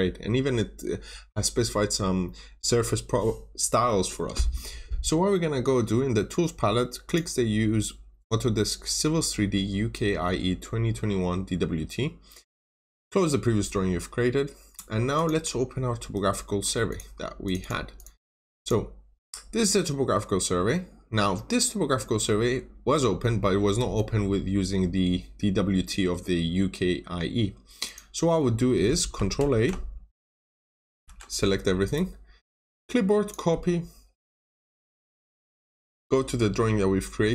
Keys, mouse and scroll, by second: 17.5 double click, 18.5 click, 23.9 middle click, 25.8 scroll up 1, 26.1-27.3 scroll down 1, 27.8 click, 28.7 click, 28.7 Escape, 29.3 ctrl+s, 29.4 ctrl+a, 30.9 ctrl+a, 31.8 right click, 32.7 click, 34.7 click.